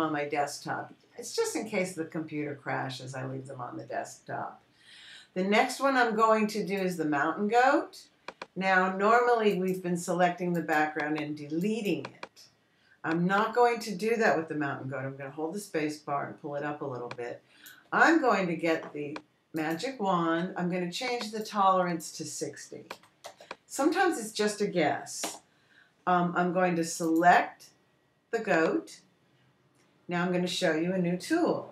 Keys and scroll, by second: 16.7 space, 24.4 6, 24.7 0, 26.7 Return.